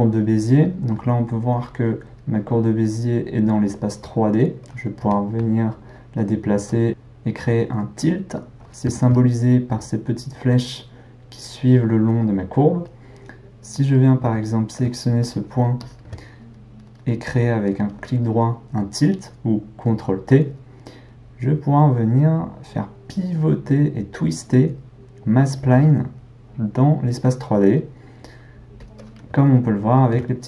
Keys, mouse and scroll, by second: 5.0 g, 8.7-12.0 ctrl+middle drag, 12.8-15.2 middle drag, 15.2 drag, 15.8 shift+click, 17.0-20.0 right drag, 29.6-30.4 ctrl+middle drag.